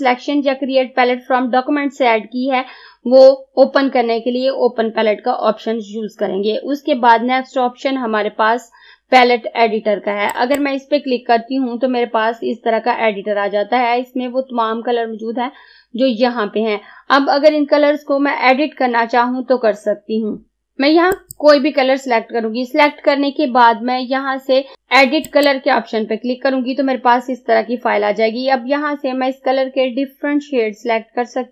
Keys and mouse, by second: 10.4 click, 21.1 click, 25.3 click.